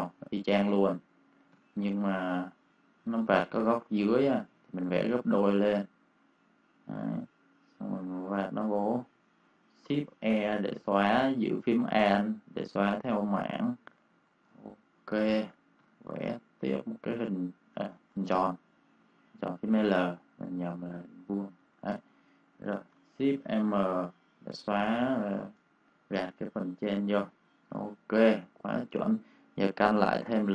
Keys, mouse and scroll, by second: 1.4 m, 3.2 click, 9.8 shift+e, 11.6 click, 14.0 v, 14.2 click, 14.4 space, 14.5 click, 15.7 m, 16.8 click, 17.8 ctrl+z, 18.3 l, 21.5 v, 21.7 click, 21.8 space, 22.0 click, 23.3 shift+m, 24.2 shift+click, 25.6-27.6 typing, 25.9 click, 26.2 click, 28.0 click.